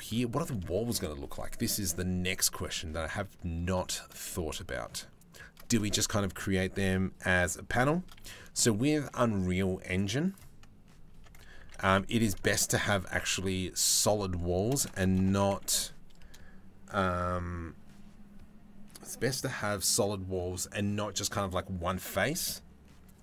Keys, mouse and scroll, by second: 0.3 shift+middle click, 2.2 middle click, 3.9 middle click, 8.6 shift+a, 10.7 Tab, 11.2 s.